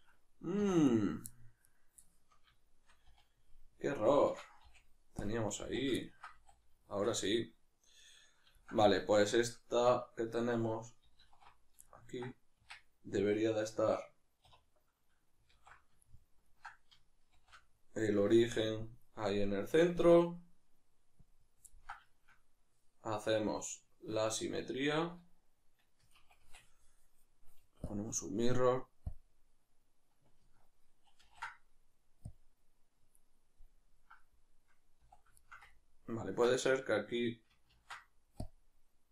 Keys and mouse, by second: 0.6 3, 0.9 right click, 1.3-2.8 middle drag, 2.8 shift+right click, 3.0 z, 6.0-14.4 ctrl+middle drag, 6.4 a, 11.2 alt+q, 12.5 Tab, 14.4 \, 15.5 alt+q, 16.0 ctrl+middle click, 17.3 shift+c, 18.7 KP_Decimal, 20.0-21.7 drag, 21.7-23.5 ctrl+middle drag, 23.5-35.4 drag, 31.2 ctrl+a, 35.4-39.1 shift+middle drag, 37.7 ctrl+a.